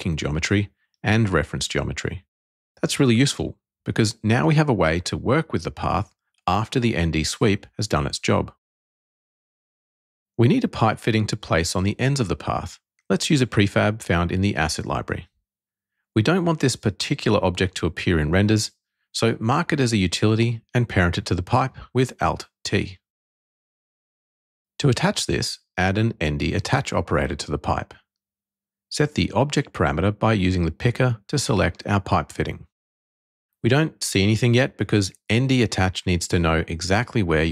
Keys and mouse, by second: 10.3 alt+z, 11.5 click, 17.6 shift+click, 19.5 alt+t, 25.1 click, 28.4 click, 30.8 click, 32.0 click, 33.4 click.